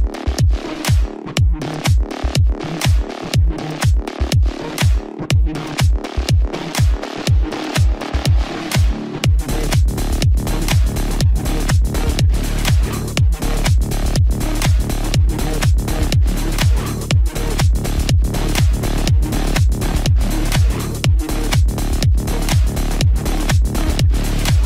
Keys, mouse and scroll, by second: 0.7 space, 0.9 click, 1.2 space, 3.6-4.1 scroll up 1, 4.1 scroll down 1, 6.5 click, 7.0 right click, 8.6 click, 10.4-12.1 typing, 12.4-18.0 drag.